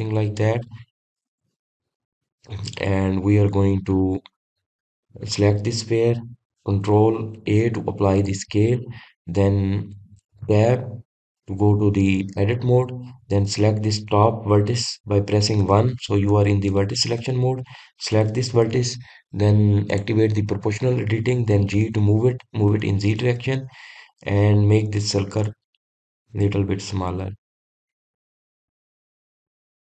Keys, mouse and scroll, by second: 1.9 scroll up 1, 1.9-4.9 middle drag, 4.9-5.9 scroll up 1, 5.9 click, 6.6 click, 9.0 ctrl+a, 10.3 click, 12.0 Tab, 12.4-13.2 scroll up 2, 14.9 click, 15.8 click, 17.1 1, 17.8-18.2 scroll up 2, 18.2 click, 18.7 scroll up 1, 19.6 scroll up 2, 19.7 click, 21.5 click, 23.3 g.